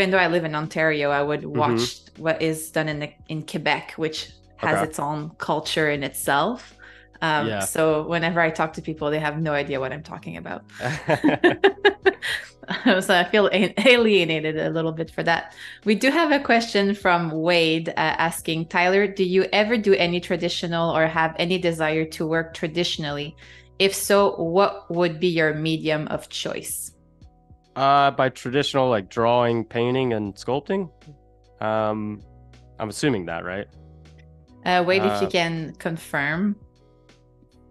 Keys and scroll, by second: 5.2 i, 6.3 a, 8.8 shift+b, 10.0 ], 11.6 [.